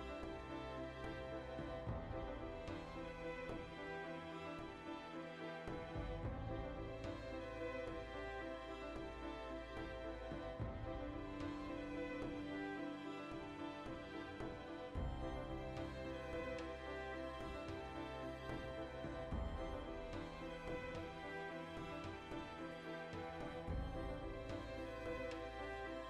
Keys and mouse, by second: 3.2 alt+right click, 3.7 ctrl+x, 4.3 alt+right click, 4.8 ctrl+x, 4.9 middle click, 5.5 alt+right click, 5.9 ctrl+x, 6.3 alt+right click, 6.7 ctrl+x, 7.0 alt+shift+right click, 7.7 ctrl+x, 7.8 ctrl+middle click, 8.8 alt+right click, 9.1 ctrl+x, 9.3 middle click, 9.8 alt+right click, 10.1 ctrl+x, 10.3-12.1 middle drag, 11.8 ctrl+r, 12.3 alt+shift+right click, 12.8 ctrl+x, 13.1-15.9 ctrl+middle drag, 15.9 right click, 16.1 l, 16.4-17.5 middle drag, 17.5 3, 17.9-19.0 alt+shift+right drag, 19.0 ctrl+KP_Subtract, 20.8-25.1 middle drag, 22.6 c, 25.1 right click, 25.2-26.0 shift+middle drag, 25.8 c.